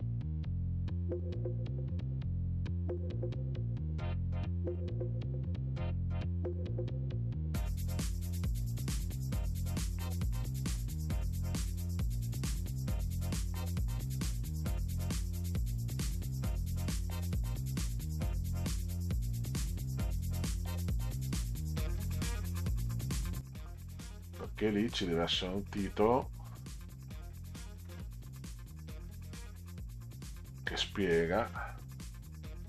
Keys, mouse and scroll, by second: 0.2 click, 0.6 click, 1.7 click, 2.3 middle click, 2.7 middle click, 3.0 g, 3.1 middle click, 3.8 middle click, 4.3 middle click, 4.4 middle click, 4.9 click, 5.0 y, 5.2 middle click, 5.4 l, 5.5 middle click, 5.8 middle click, 5.9 middle click, 6.8 click, 7.3 ctrl+scroll down 2, 7.6 middle click, 7.7 click, 9.5 click, 9.8 Delete, 10.1 click, 10.3 click, 10.8 Delete, 11.0 middle click, 11.4 click, 11.7 Delete, 11.8 middle drag, 12.4 middle click, 12.9 scroll up 2, 13.6 scroll down 2, 13.8 click, 14.4 middle click, 14.9 click, 15.7 click, 15.9 drag, 16.6 shift+click, 16.8 click, 16.8 middle click, 17.4 click, 18.1 click, 18.9 middle click, 19.6 click, 19.7 middle click, 19.8 click, 20.4 middle drag, 20.6 middle drag, 20.8 Down, 21.3 middle click, 21.6 middle click, 22.2 click, 22.5 click, 23.0 middle click, 23.2 click, 23.4 Down, 24.8 Down, 27.8 Down, 29.0 Down, 30.7 Down.